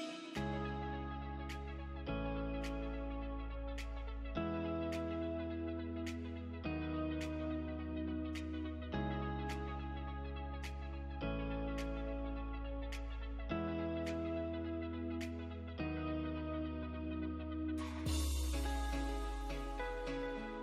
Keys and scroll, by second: 5.1 Escape, 5.8 Delete, 7.5 F3, 11.5 ctrl+g, 13.1 F3, 13.4 F2.